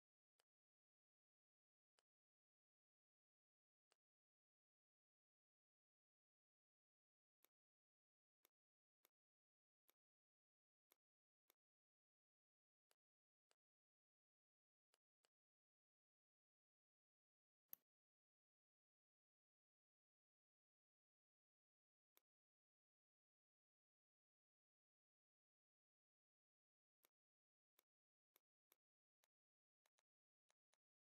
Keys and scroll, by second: 3.5 a, 4.9 shift+m, 14.7 z, 15.1 space, 15.6 v, 18.5-19.1 typing, 18.8 Tab, 19.4 Tab, 21.0 Return, 22.5-24.7 typing, 23.2 Right, 24.0 Tab, 25.0 Tab.